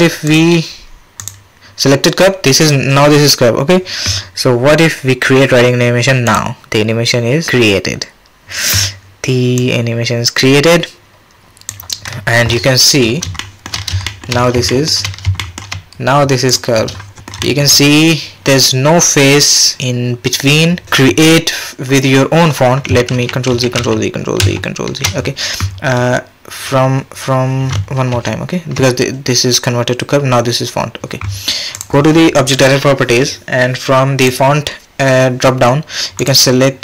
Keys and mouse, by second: 8.6-9.6 middle drag, 11.7-13.4 middle drag, 13.4-13.7 shift+drag, 13.7-14.1 shift+middle drag, 14.1 shift+drag, 14.7 shift+middle click, 15.4 shift+click, 16.5-17.3 drag, 17.4 shift+drag, 23.1 ctrl+z, 23.5 ctrl+z, 23.8 ctrl+z, 24.4 ctrl+z, 28.1 ctrl+z, 31.8 click, 34.2 click, 36.2 click.